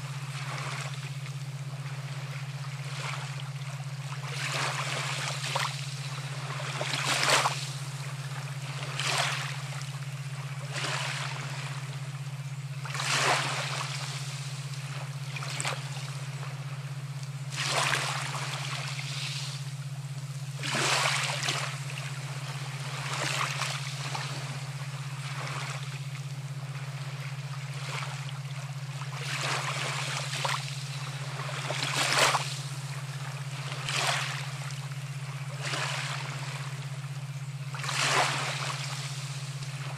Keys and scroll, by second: 0.7 ctrl+t, 14.2-15.8 typing, 30.7 space, 32.1 [, 33.5 [.